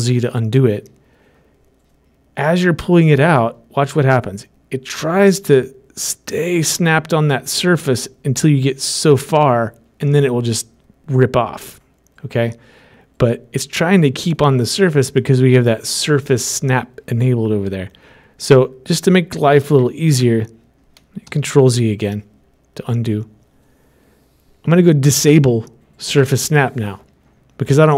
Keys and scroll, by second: 21.8 ctrl+z.